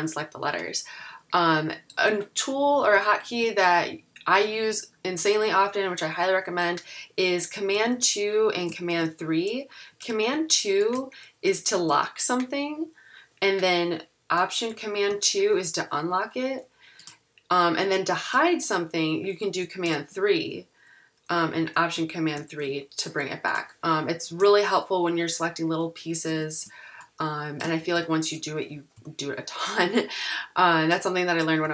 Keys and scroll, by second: 2.9 super+=, 11.9 super+2, 15.2 alt+super+2, 20.0 super+3, 24.5 super+=, 26.3 super+=, 27.9 super+-, 29.0 m.